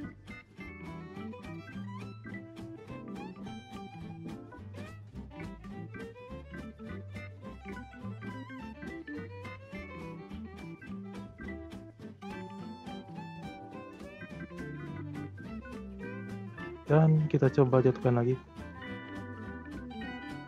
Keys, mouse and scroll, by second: 0.5 shift+scroll up 1, 0.6-1.3 shift+middle drag, 1.3-1.7 scroll down 1, 1.7-3.5 shift+middle drag, 3.5 g, 7.2 shift+s, 7.9 r, 11.6-14.6 drag, 15.6 g.